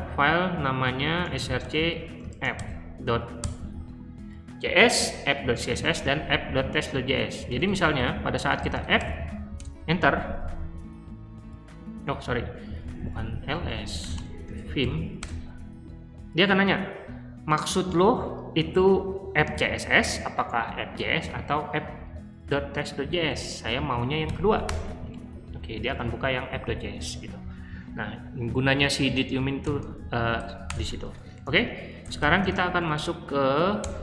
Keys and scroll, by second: 0.5-2.8 typing, 3.4 Tab, 7.5-9.3 typing, 9.6 Return, 12.4 Up, 24.2 2, 24.6 Return, 29.6 shift+;, 30.3 q, 30.6 Return, 31.4-34.0 typing, 33.4 Tab.